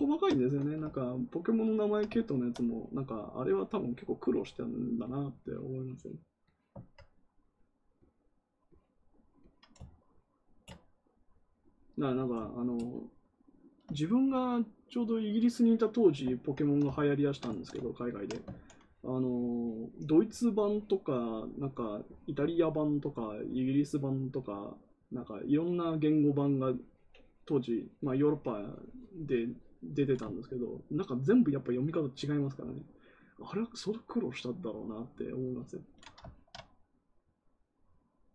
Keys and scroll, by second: 18.4 ctrl+z.